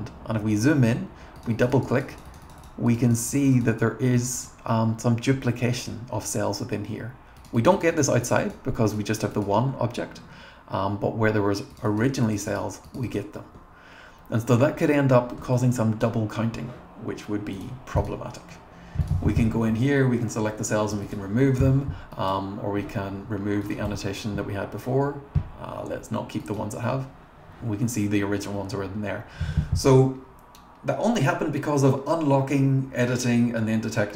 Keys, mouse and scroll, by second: 0.2-0.9 scroll up 2, 1.4 click, 1.6 click, 1.8 click, 2.0 click, 2.2 click, 2.3 click, 2.5 click, 2.9 click, 3.1 click, 3.3 click, 3.4 click, 3.6 click, 3.8 click, 5.3-6.2 scroll down 3, 6.6-6.9 scroll up 1, 7.4 click, 7.6 click, 7.7 click, 7.9 click, 8.1 click, 8.2 click, 8.4 click, 8.9 click, 9.3 click, 9.8 scroll down 2, 10.6-11.3 scroll up 2, 11.7 click, 11.9 click, 12.1 click, 12.3 click, 12.9 click, 13.2 click, 13.8-14.5 scroll down 3, 14.5-15.2 scroll up 3, 15.6 click, 17.6 click, 18.0 click, 19.0 click, 19.7-20.1 scroll up 2, 20.1 scroll down 2, 21.1 click, 22.1 click, 22.4-22.8 scroll, 23.6 click, 23.9 BackSpace, 26.4 click.